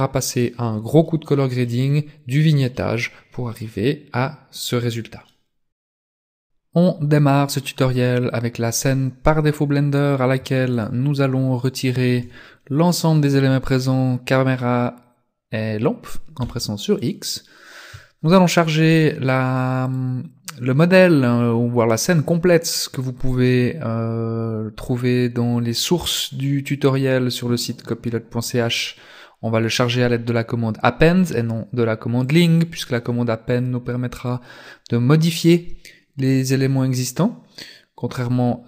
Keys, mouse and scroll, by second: 10.7 shift+right click, 11.7 shift+right click, 16.5 x, 20.0 click.